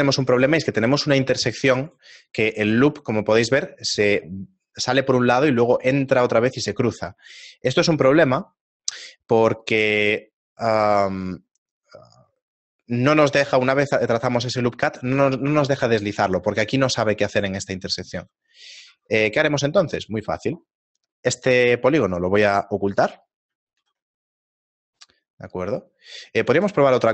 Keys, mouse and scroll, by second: 1.9 right click, 2.6 ctrl+r, 14.0 click, 18.1 ctrl+z, 18.9 ctrl+Tab, 20.0 right click, 23.0 h, 23.8 ctrl+r, 26.1 right click, 26.5 ctrl+z.